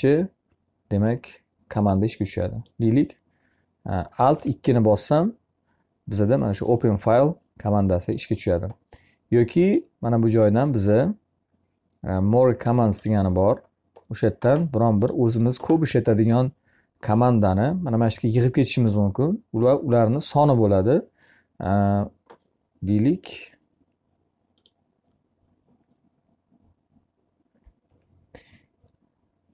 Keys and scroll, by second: 3.7 2.